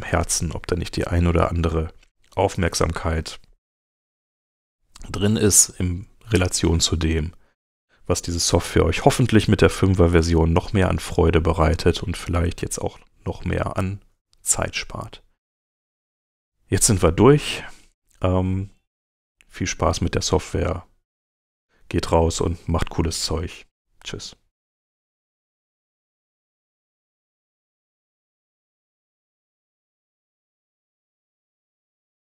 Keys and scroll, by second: 5.1 super+Tab.